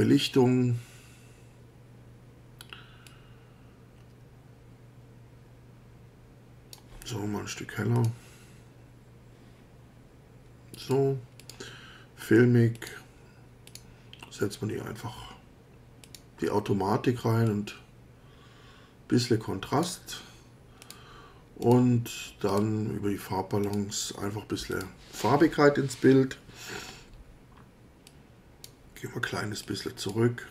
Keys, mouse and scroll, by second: 3.1-6.9 drag, 8.0 click, 10.8 click, 11.4 click, 12.8 click, 13.7 click, 16.0 click, 17.5-20.0 drag, 20.8 click, 21.6 click, 22.5 click, 23.6 click, 24.7 click, 28.1 click, 29.6 click.